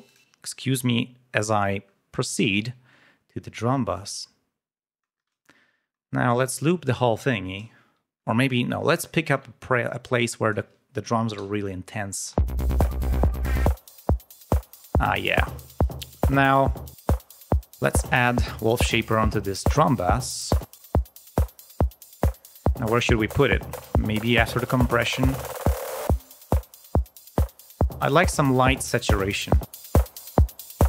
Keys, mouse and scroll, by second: 0.0 click, 1.2-1.6 scroll down 2, 1.8-2.5 scroll up 2, 3.8 click, 5.3 ctrl+scroll down 2, 6.2 click, 8.4 scroll down 2, 8.9 ctrl+scroll up 2, 9.8 click, 12.2 l, 12.5-12.9 scroll up 2, 13.6 click, 14.8 click, 15.9 right click, 17.1-17.7 scroll down 2, 20.5 click, 22.3 click, 27.3 right click, 27.6-28.7 drag, 29.2-30.3 drag.